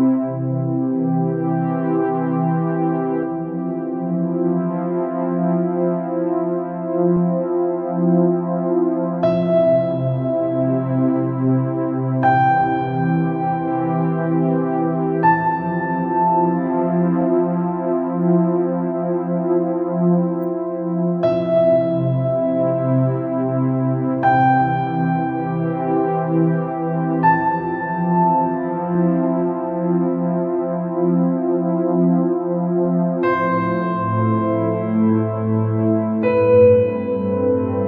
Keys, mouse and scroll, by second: 1.7 ctrl+z, 2.3 ctrl+z, 4.9 alt+e, 9.3 click, 9.6 scroll down 3, 9.7 middle click, 10.2 scroll up 2, 10.6 middle click, 11.4 scroll up 3, 11.8-13.2 middle drag, 13.2-13.7 scroll down 4, 13.7 middle click, 14.2 scroll up 3, 14.7 middle click, 15.6-16.9 drag, 17.2 scroll down 2, 17.3 middle click, 17.9 scroll up 2, 18.5 scroll down 2, 18.7-19.7 middle drag, 19.7 scroll up 2, 20.7-22.2 drag, 22.2 scroll up 2, 22.6 scroll down 1, 22.9 middle click, 23.6 scroll up 1, 24.4 click, 25.6 click, 27.9 click, 28.7 alt+click, 31.1 ctrl+b, 35.9 alt+e.